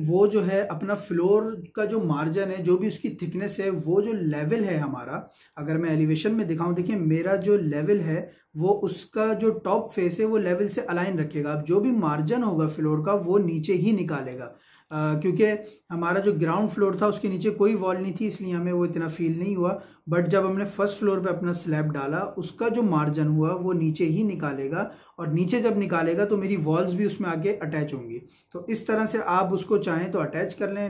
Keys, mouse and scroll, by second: 5.4 click, 6.7-7.1 scroll up 1, 7.5 middle click, 13.1 scroll up 1, 14.3 middle click, 14.8-15.3 scroll down 1, 20.2-20.7 scroll up 1.